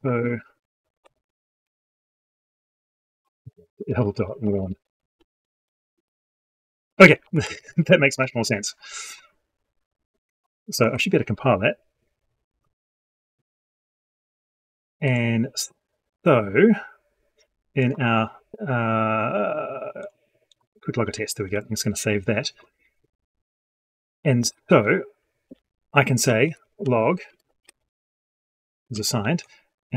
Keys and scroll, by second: 5.8 ctrl+space, 10.6 ctrl+F9, 21.3 ctrl+s.